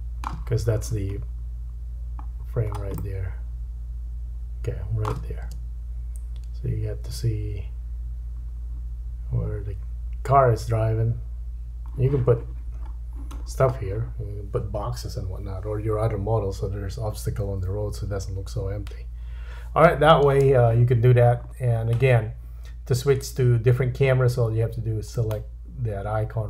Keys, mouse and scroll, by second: 1.3-2.0 scroll down 2, 2.6-3.0 scroll up 1, 3.0 shift+middle click, 5.5 space, 12.8-16.5 scroll down 6, 20.3 space, 21.3-22.2 scroll down 2, 22.2-23.2 scroll down 1, 25.1 click.